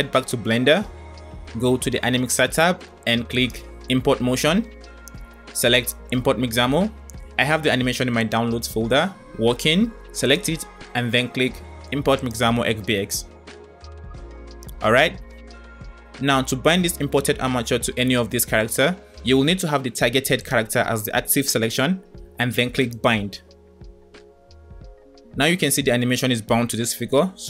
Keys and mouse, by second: 3.3-6.0 drag, 20.3 click, 24.2-27.4 drag.